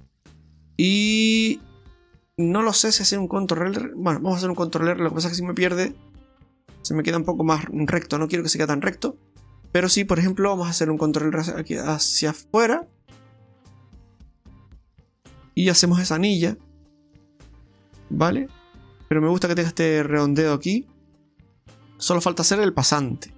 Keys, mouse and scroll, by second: 0.0 middle click, 4.2 ctrl+r, 5.9 middle click, 6.1 middle click, 7.9 ctrl+z, 8.3 middle click, 10.3 ctrl+r, 13.1 middle click, 14.0-14.8 scroll down 4, 14.3 right click, 14.8 middle click, 15.9 Tab, 16.1 middle click, 20.7 scroll down 2, 20.9 middle click, 21.8 click, 21.8 middle click.